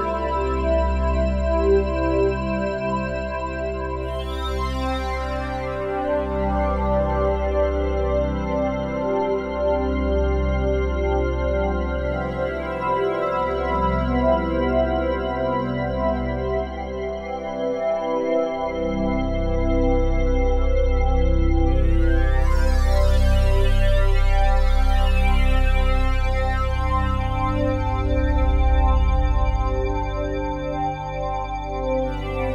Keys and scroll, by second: 7.5 s.